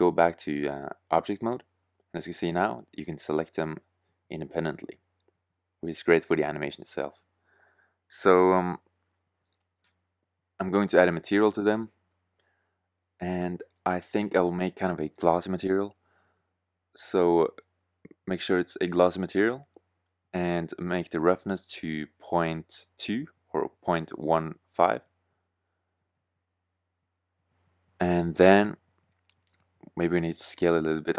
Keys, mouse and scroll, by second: 3.5-4.8 middle drag, 7.5-9.0 middle drag, 11.6 middle click, 14.5-16.0 drag, 16.8-18.2 drag, 19.3-21.1 drag, 26.0 shift+z, 28.6 s.